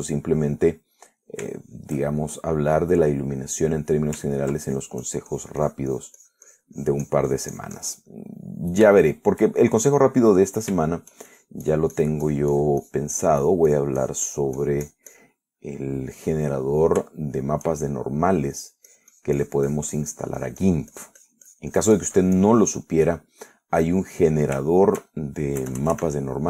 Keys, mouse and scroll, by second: 0.5-1.5 drag, 1.5 middle click, 2.2 middle click, 2.8 shift+middle click, 3.3-5.3 shift+middle drag, 5.6 ctrl+click, 6.1-9.3 ctrl+drag, 9.4 ctrl+middle click, 10.2 shift+middle click, 10.9 shift+middle click, 11.5 shift+middle click, 12.5-16.7 shift+drag, 16.7 shift+middle click, 17.3 right click, 18.4 shift+middle click, 19.2 shift+middle click, 19.9-24.1 drag, 24.2 middle click, 24.8 scroll down 1, 24.9 middle click, 25.9 shift+middle click.